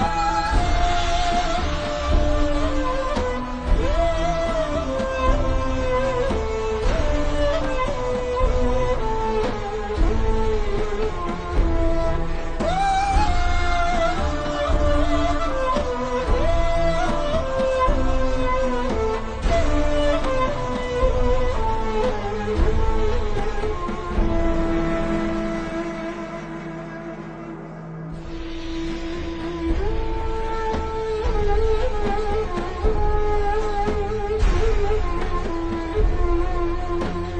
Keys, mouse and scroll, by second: 0.1 scroll up 1, 5.0 n, 5.9-7.3 alt+shift+scroll up 2, 8.6 click, 11.5 click, 19.4 ctrl+Num_Lock, 19.9 typing, 20.5 click, 24.8 shift+click, 28.2 click, 32.3 z, 32.8 click.